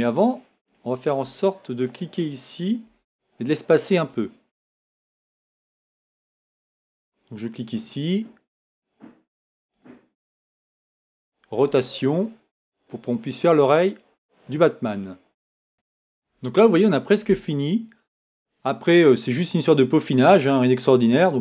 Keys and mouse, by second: 2.9 g, 8.1-9.7 right drag, 11.6 r.